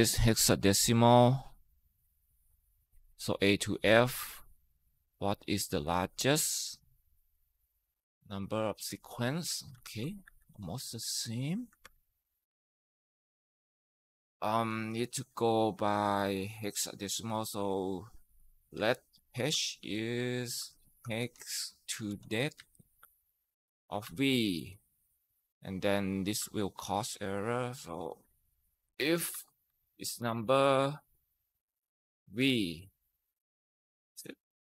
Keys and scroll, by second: 9.6 ctrl+c, 10.1 Escape, 11.6 ctrl+v, 14.0 typing, 17.8-21.9 typing, 22.4 Down, 22.6 Tab, 23.6-24.4 typing, 25.9-26.7 typing, 28.4-30.6 typing, 31.7-32.5 typing.